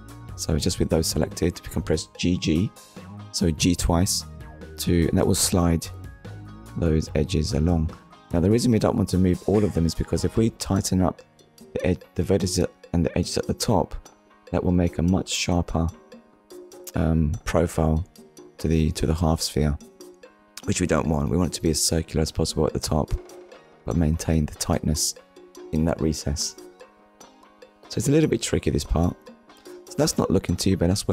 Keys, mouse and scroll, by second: 1.7 click, 2.0 middle click, 3.4-3.8 scroll down 2, 3.8 shift+middle click, 4.2 middle click, 7.1 middle click, 14.5 ctrl+r, 16.6 click, 18.3 click, 19.4 ctrl+r, 20.2 click, 22.4 click, 24.0 Tab, 24.5 scroll down 1, 27.2 click, 28.1 click, 29.6 shift+middle click, 30.1 middle click.